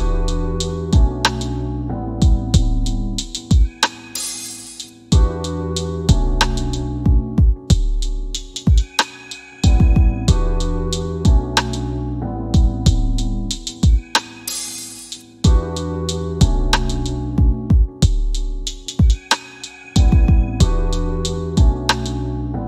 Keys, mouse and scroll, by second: 1.8 f, 3.8 scroll down 1, 12.6 middle click, 16.2 scroll down 1, 16.6 scroll up 1, 17.2 middle click, 18.2 scroll up 1, 18.8 middle click, 19.4 scroll down 1, 20.4 middle click, 21.8-22.1 scroll up 1, 22.1 middle click.